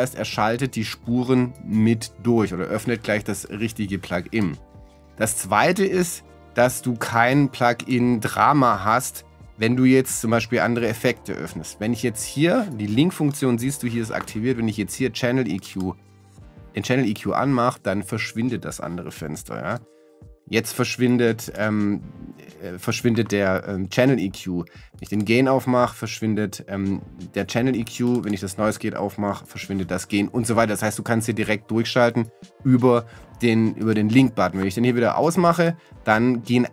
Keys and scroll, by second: 0.4 Down.